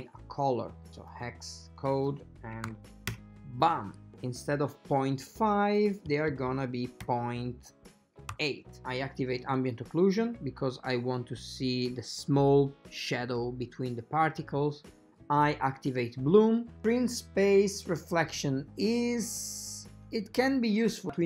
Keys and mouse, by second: 4.1-8.8 drag, 16.2 click.